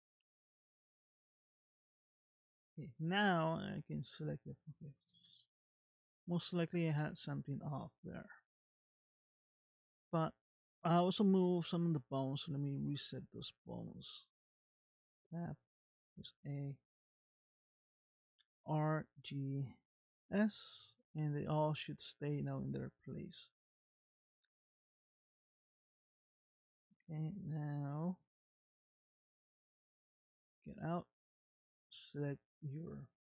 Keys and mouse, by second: 0.3 click, 1.4 Tab, 2.4 middle click, 3.8 click, 5.0 middle click, 6.9-8.5 middle drag, 9.2 middle click, 13.0 Tab, 13.7 click, 14.9 ctrl+Tab, 15.9 a, 18.5 alt+r, 19.0 alt+g, 20.3 alt+s, 30.2 ctrl+Tab, 31.3 click.